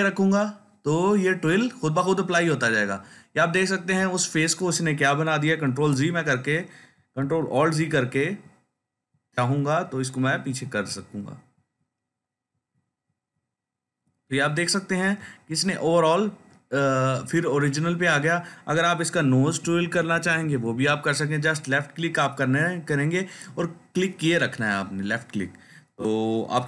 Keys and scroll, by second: 5.6 ctrl+z, 7.2 ctrl+alt+z, 8.1 ctrl+alt+z, 12.4 ctrl+z, 19.3-20.6 typing.